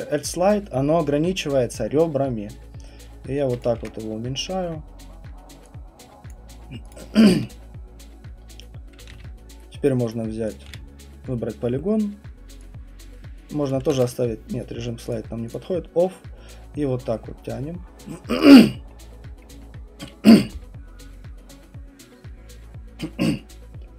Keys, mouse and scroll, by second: 0.2 click, 3.6 click, 4.4 ctrl+alt+1, 4.6 alt+middle click, 6.3 click, 6.9 click, 9.1 q, 10.1 right click, 10.5 click, 10.6 r, 13.7 click, 15.1 ctrl+z, 15.1 click, 15.6 click, 18.4 click, 18.9 middle click, 18.9 middle click, 19.4 alt+middle click, 19.4 alt+middle click, 19.6 alt+middle click.